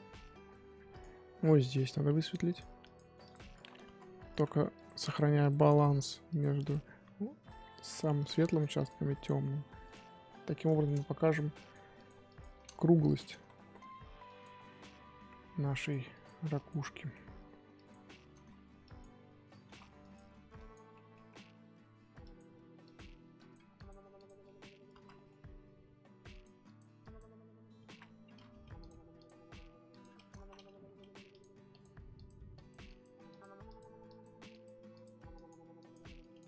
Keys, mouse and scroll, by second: 0.0-1.0 scroll up 4, 1.0 click, 2.0 f, 2.5-3.6 drag, 3.6 ctrl+z, 3.8 ctrl+z, 4.3 ctrl+z, 4.7-9.2 drag, 9.2 middle click, 9.8 click, 10.4-10.7 scroll up 2, 10.7 shift+middle click, 11.3-12.7 drag, 12.7 ctrl+z, 13.0 click, 13.3 ctrl+z, 13.6 ctrl+z, 14.2 click, 14.9-15.3 scroll up 2, 15.3-15.8 scroll down 1, 15.8-16.9 drag, 16.9 middle click, 17.7 click, 18.4 ctrl+z, 18.8 click, 19.6 ctrl+z, 20.0 click, 20.9 middle click, 21.3-22.2 scroll down 4, 22.2-24.4 drag, 24.4 middle click, 24.6-24.9 scroll up 1, 24.9 ctrl+z, 25.1 middle click, 25.4-25.8 scroll up 2, 25.8-26.3 scroll down 1, 26.3-27.9 drag, 27.9 ctrl+z, 28.4 f, 29.1-30.3 drag, 30.3 ctrl+z, 30.8 f, 31.7-36.4 drag.